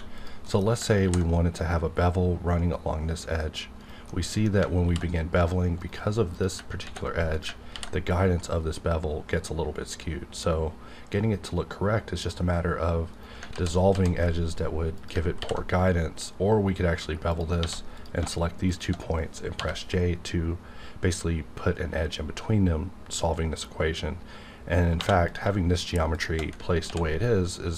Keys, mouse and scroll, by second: 0.2 click, 0.4 middle click, 0.6 scroll up 1, 1.0 ctrl+b, 2.0-3.3 scroll up 1, 3.8 right click, 4.1 middle click, 4.9 ctrl+b, 5.8 right click, 6.3 click, 6.8 ctrl+x, 7.4 click, 7.7 ctrl+b, 8.5-11.5 scroll up 2, 13.1 right click, 13.5 ctrl+z, 14.9 click, 15.4 ctrl+b, 16.4-17.2 scroll up 2, 17.2 click, 17.6 1, 17.9 click, 19.5 j, 25.0 2, 25.2 click, 25.8 shift+click, 26.9 ctrl+x.